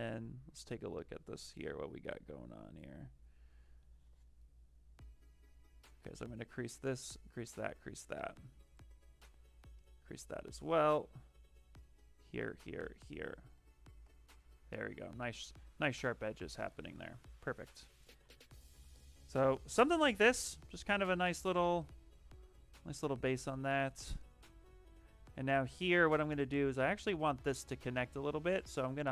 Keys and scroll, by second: 13.4 d, 14.0 shift+f, 23.0-23.9 typing.